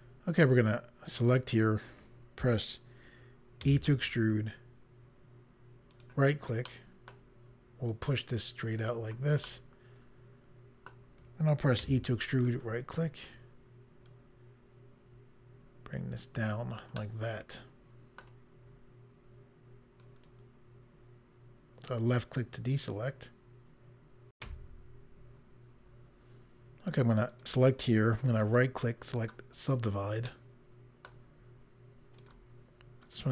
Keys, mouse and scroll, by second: 1.0 click, 3.5 e, 5.8 right click, 6.6 middle click, 7.8 click, 9.3 middle click, 11.7 e, 12.2 right click, 14.0 click, 16.9 middle click, 19.9 click, 24.3 Pause, 27.2 click, 28.4 right click, 29.1 click, 30.2 middle click, 32.2 click, 33.0 click.